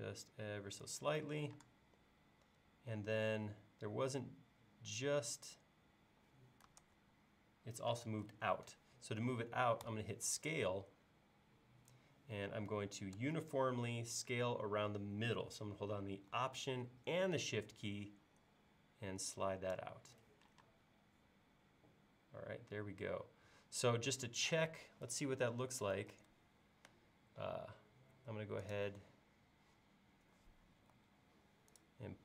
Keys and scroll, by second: 1.6 space, 6.8 super+Tab, 8.3 super+Tab, 9.8 s, 20.6 space, 26.1 super+s, 30.9 Tab.